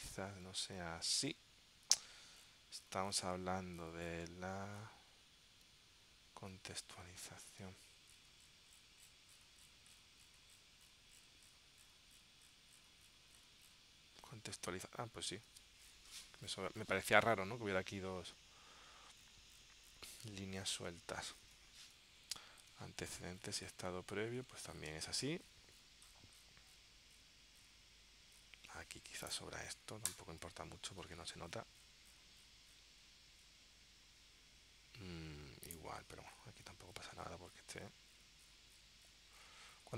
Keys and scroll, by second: 6.9 super+Tab, 15.5 super+Tab, 22.8 super+Tab, 24.5 super+Tab.